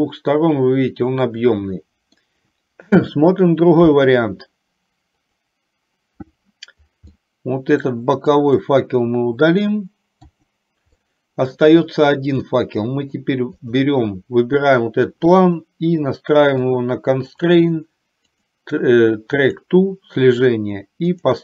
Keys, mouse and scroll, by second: 5.4 click, 7.3 middle click, 8.5 click, 10.4 Delete, 11.2 middle click, 12.7 middle click, 13.7 click, 16.8 click, 17.4 click, 18.4-19.8 drag, 21.2-21.4 drag.